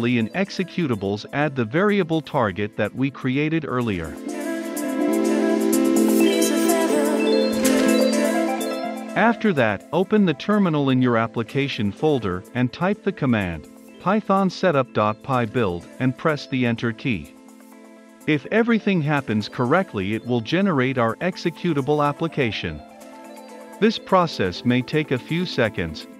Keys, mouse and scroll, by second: 0.7-1.9 typing, 2.2 Return, 3.0-5.2 drag, 5.2 ctrl+s, 6.7-10.0 drag, 12.9-16.4 typing, 17.0 Return.